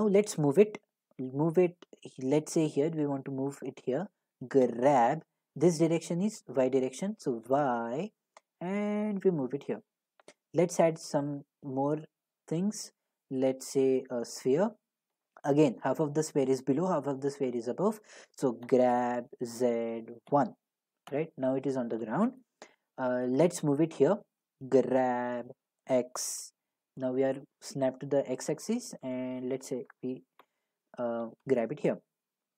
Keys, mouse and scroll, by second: 0.1-4.8 middle drag, 4.7 g, 4.8-5.1 scroll up 1, 7.5 y, 9.7-12.6 drag, 10.7 a, 14.4 click, 15.9 middle click, 18.7-20.3 typing, 21.1 Return, 22.7 middle click, 24.8 g, 25.9 x, 26.2-27.4 scroll, 29.9 click, 31.5 click, 31.7 click, 31.9 click, 32.0 middle click.